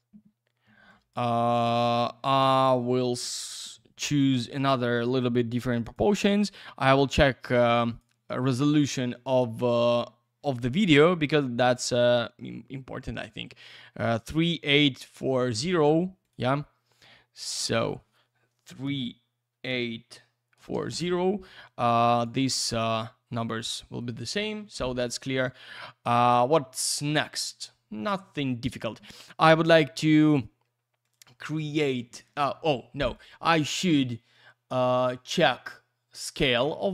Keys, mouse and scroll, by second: 0.9 click, 2.8 click, 4.5 click, 5.8 click, 7.2 click, 7.7 click, 9.8 click, 15.3 click, 16.2 click, 17.4 click, 18.8 typing, 20.9 Return, 22.1 click, 24.0 click, 25.4 click, 29.6 click, 31.0 click, 31.9 click, 33.1 click.